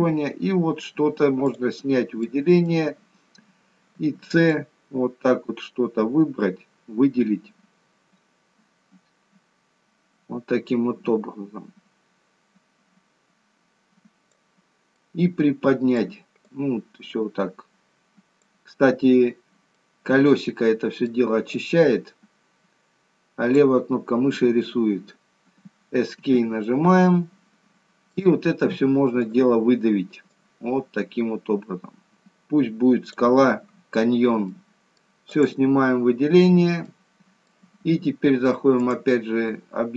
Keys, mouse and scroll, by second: 0.3-0.7 scroll up 3, 0.7-1.1 scroll down 1, 1.6 click, 2.2 scroll down 1, 2.5 middle click, 3.2-3.7 scroll down 2, 4.0 c, 26.6 middle click, 29.3 click, 30.4 click, 34.1-35.4 scroll down 4, 34.5 middle click, 35.4 click, 35.9-36.3 scroll up 4, 36.5 scroll down 1, 36.8 middle click, 38.8 click.